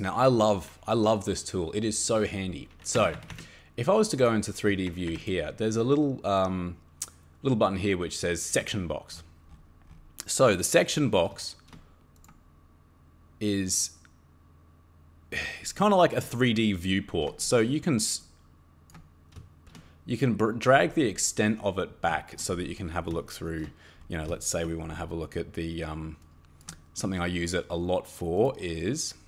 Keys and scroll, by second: 3.0 Escape, 3.1 Escape, 3.3 Escape, 4.8 Escape, 5.1 Escape.